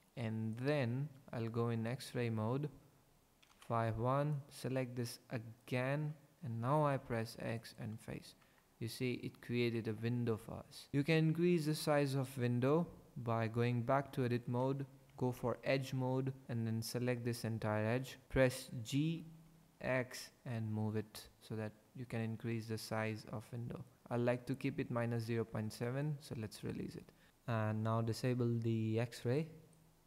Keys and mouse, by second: 1.9 click, 3.4 KP_5, 3.5 KP_1, 4.3 click, 6.8 x, 8.4 Tab, 10.9 Tab, 12.7 Tab, 15.1 2, 16.4 click, 19.0 g, 19.5 x, 25.8 click, 26.9 Tab, 29.2 click.